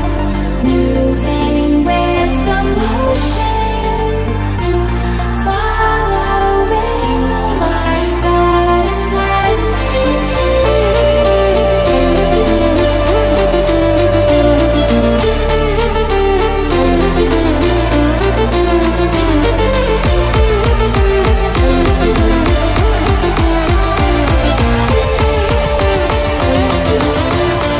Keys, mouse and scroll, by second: 0.1 ctrl+scroll up 1, 3.1-3.5 ctrl+scroll up 1, 5.7 shift+click, 8.7 ctrl+shift+0, 9.8 shift+v, 10.6-18.9 shift+drag, 21.8-26.3 shift+drag, 26.3 shift+right click, 27.6 shift+click.